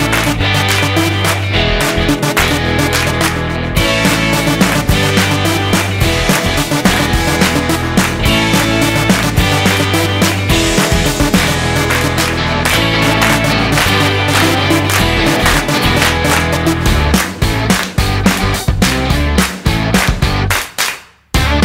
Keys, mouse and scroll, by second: 0.0 click, 2.4 middle click, 5.0 middle click, 6.1 shift+middle click, 6.9 middle click, 8.0-8.7 scroll up 3, 11.2 click, 12.3 click, 16.5-17.4 scroll up 2, 17.4 middle click, 18.9 click.